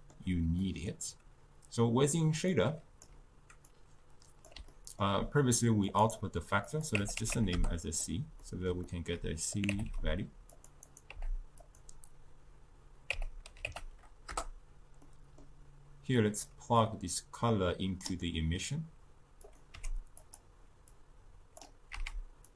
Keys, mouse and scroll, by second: 0.7-2.6 middle drag, 2.6-3.8 drag, 4.8 scroll down 2, 4.8-6.0 ctrl+middle drag, 6.0-8.5 drag, 8.5-9.6 middle drag, 9.6 click, 9.9 c, 11.6-14.8 drag, 15.1-16.5 middle drag, 16.5-18.3 drag, 18.3-19.5 middle drag, 19.5 click, 19.8 g, 21.0-21.9 drag, 21.9 z.